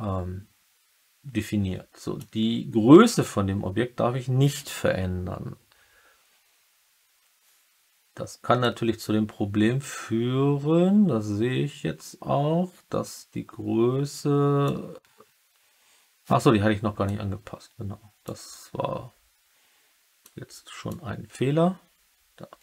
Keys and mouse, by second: 8.5-14.6 drag, 17.0-18.2 drag, 20.1 click.